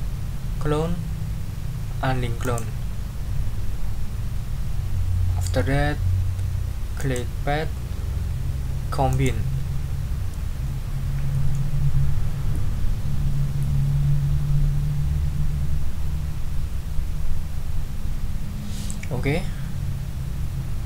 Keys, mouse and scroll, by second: 2.4 click, 7.0 click, 9.1 click.